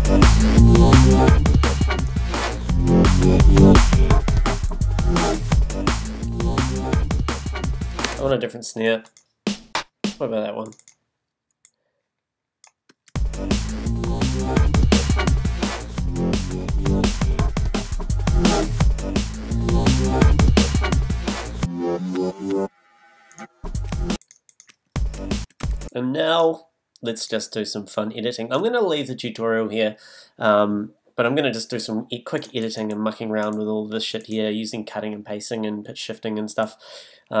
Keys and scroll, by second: 8.0 space, 9.4 Down, 12.9 space, 23.9 space.